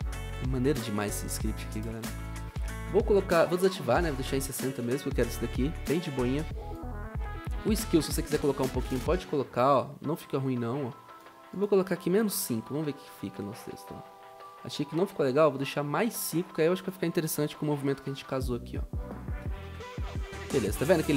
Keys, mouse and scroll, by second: 1.2-2.0 typing, 4.6 typing, 12.7 Return, 13.0 0, 17.6-18.1 typing, 17.7 Return, 19.3-20.1 typing.